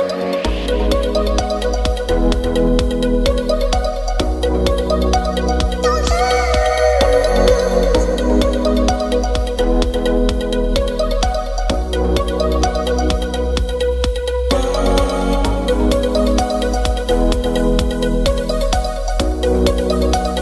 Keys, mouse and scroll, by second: 3.5 ctrl+b, 9.6 ctrl+b, 12.6 click, 16.9 click.